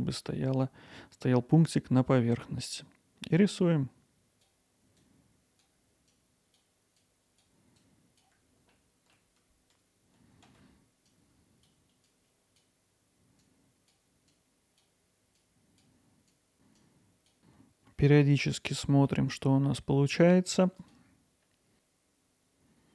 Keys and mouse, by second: 3.6-6.5 drag, 6.5 alt+middle click, 6.8 alt+z, 6.9 click, 7.9 alt+middle click, 8.0 click, 8.4 alt+middle click, 8.5 click, 8.7 click, 8.9 click, 9.1 alt+middle click, 9.3 click, 9.5 click, 9.6 alt+middle click, 9.7 click, 10.1 middle click, 10.2 click, 10.5 alt+middle click, 10.7 click, 11.1 alt+middle click, 11.3-13.7 drag, 13.7 alt+middle click, 13.8-15.9 drag, 17.0 click, 20.8-22.2 drag, 22.4-22.9 drag.